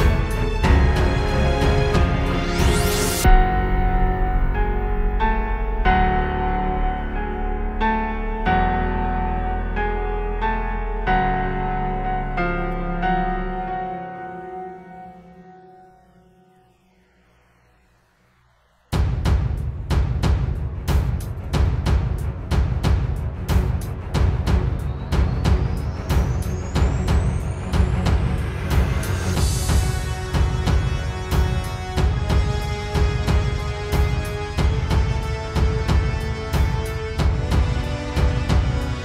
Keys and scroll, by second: 20.2 space, 23.7 space, 24.2 space, 24.8 super+space, 25.1 super+space, 36.6 super+g, 37.7 space, 38.3 space, 38.6 space.